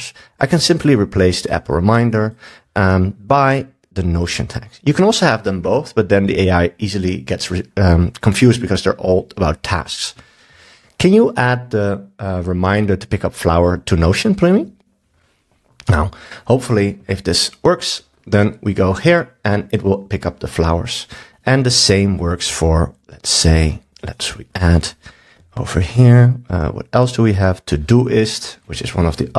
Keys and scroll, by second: 10.5 super+s.